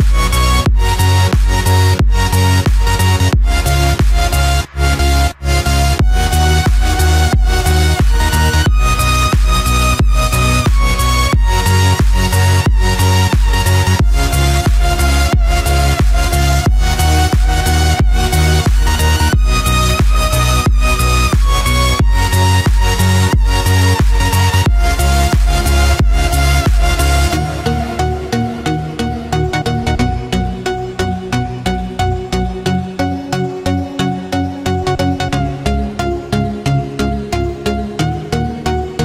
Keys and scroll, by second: 8.1 ctrl+-, 9.4 ctrl+=, 17.0 ctrl+-, 22.4 ctrl+-, 23.6 ctrl+0.